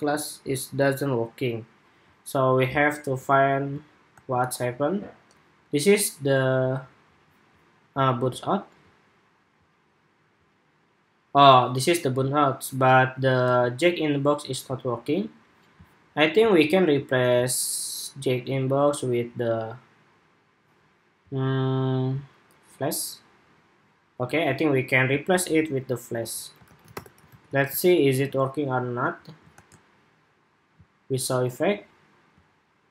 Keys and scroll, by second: 3.8 super+r, 13.1 super+r, 27.0 super+s, 27.5 super+Tab, 29.3 super+r.